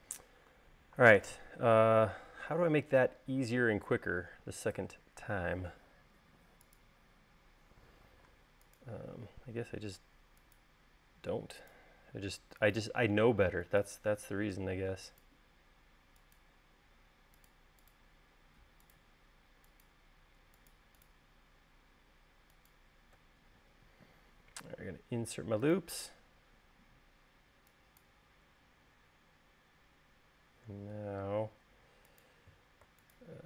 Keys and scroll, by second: 7.3 u.